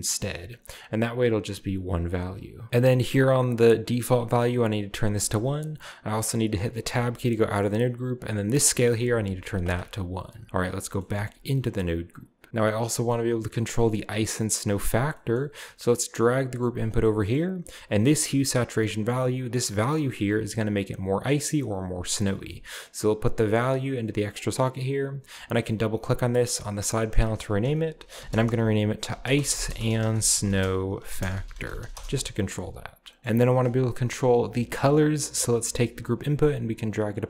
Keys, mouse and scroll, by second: 1.9 click, 2.6 scroll down 1, 4.3 click, 4.9 1, 5.2 click, 6.8 Tab, 7.6-8.6 scroll up 1, 8.8-10.8 drag, 9.0 1, 10.8 middle click, 11.7-12.4 scroll down 1, 12.4 g, 14.6-15.9 drag, 15.0 scroll down 1, 15.9 g, 16.8 click, 17.0-17.4 scroll down 1, 17.0-18.3 middle drag, 17.4 scroll up 1, 18.3-22.1 drag, 22.2 middle click, 22.4-23.1 scroll down 1, 22.7-23.1 middle drag, 23.4-25.1 drag, 26.7-27.7 drag, 28.2-32.5 typing, 33.3-35.8 middle drag, 35.9 right click, 36.0-37.1 scroll down 1, 36.1 right click, 36.5 g, 37.1-37.2 drag.